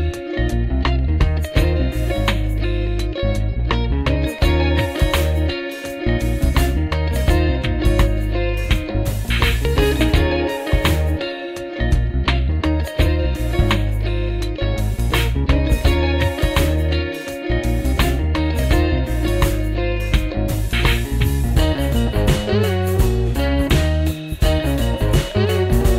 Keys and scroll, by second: 3.8 r, 11.8 F3, 15.1 F3, 17.1 F3, 18.5 F3, 19.0 F3, 19.9 w, 25.0 F4.